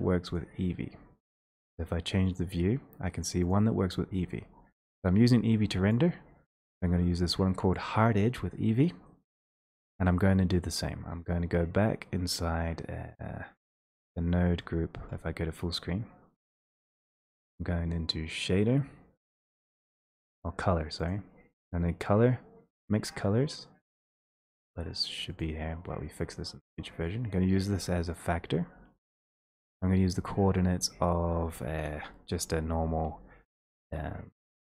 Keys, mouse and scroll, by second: 0.4 click, 9.6 click, 11.2-11.5 scroll down 3, 12.4-12.9 scroll, 15.0 ctrl+space, 16.8 click, 21.1 click, 22.9 click, 24.5 click, 24.5 click, 25.4 click, 28.2 click, 29.4 middle click, 30.8 click, 34.6 click.